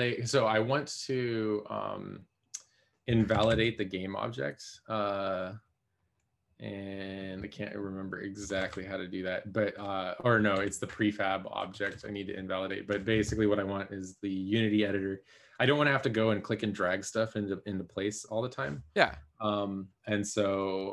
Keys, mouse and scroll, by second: 3.7-4.4 typing, 9.1 BackSpace, 10.5 t, 10.8 BackSpace, 11.9 BackSpace.